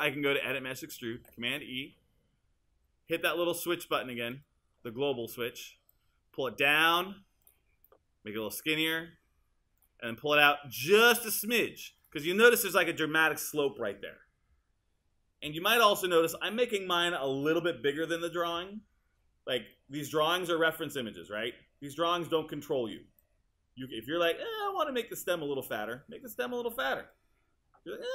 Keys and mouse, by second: 1.2 super+e, 23.2 click.